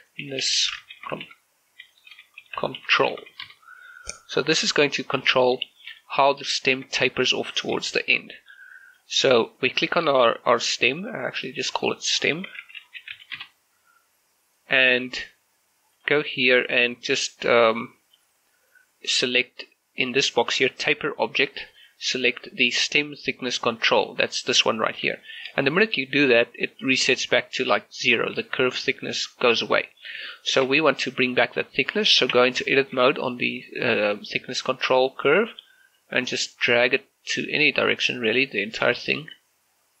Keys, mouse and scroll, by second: 0.0-3.2 typing, 3.5 Return, 5.5 scroll down 1, 5.7 shift+middle click, 6.4 scroll down 1, 6.7 shift+middle click, 8.2 scroll up 1, 8.4 shift+middle click, 8.7 middle click, 9.6 right click, 10.0 shift+middle click, 11.6 click, 12.6-13.2 typing, 13.4 Return, 16.0 click, 21.8 click, 25.3 shift+middle click, 30.0 right click, 30.4 shift+middle click, 32.0-32.4 scroll up 1, 32.4 Tab, 32.8 shift+middle click, 36.0-40.0 drag.